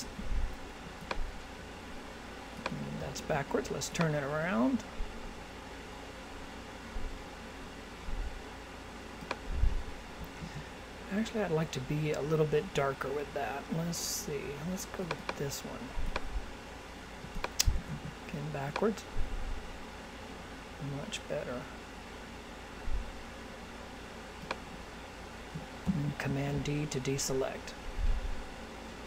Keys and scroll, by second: 3.2 super+z, 10.4 super+z, 17.8 super+z, 26.3 super+d.